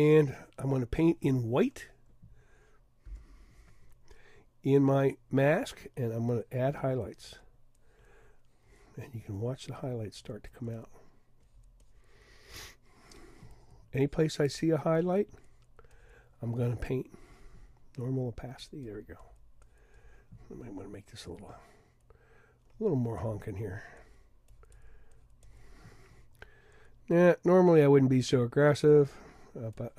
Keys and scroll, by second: 3.0 x, 3.6 x.